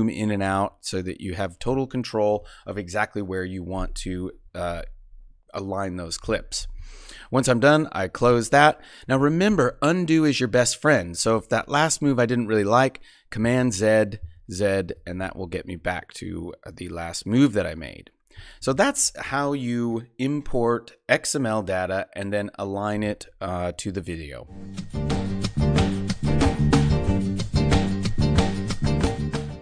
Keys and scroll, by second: 13.4 super+z.